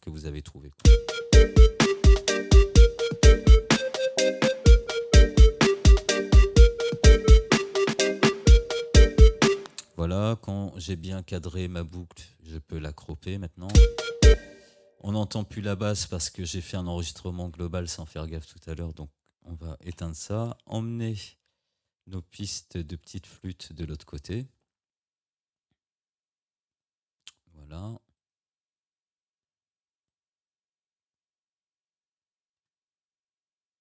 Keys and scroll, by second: 0.9 space, 9.6 space, 13.8 space, 20.0 Delete, 32.7 Tab.